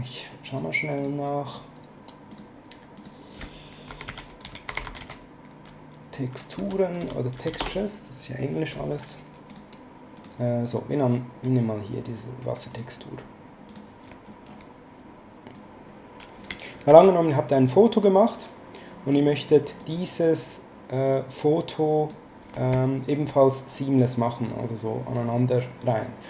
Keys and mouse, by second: 0.5 click, 3.6-5.5 typing, 6.6 n, 7.0 BackSpace, 7.4 s, 7.6 Return, 9.5 click, 12.7 click, 15.5 click, 16.9 ctrl+z, 17.8 click, 19.3 click, 21.0 click.